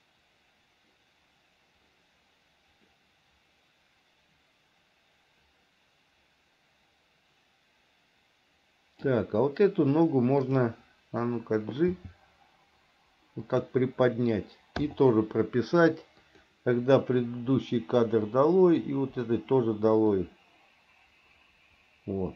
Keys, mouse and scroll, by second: 10.6 click, 12.1 g, 15.0 i, 16.4 click, 17.5 Delete, 18.5 click, 19.4 Delete, 20.4-22.3 drag.